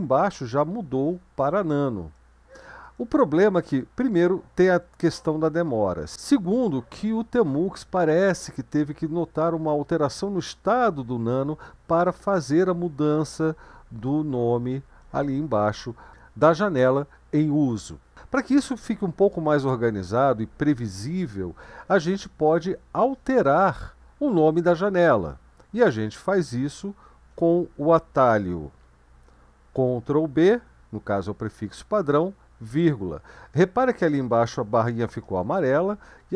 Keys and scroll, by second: 4.2-5.2 BackSpace, 4.8 BackSpace, 30.1 ctrl+b, 31.4 ,, 36.2 BackSpace.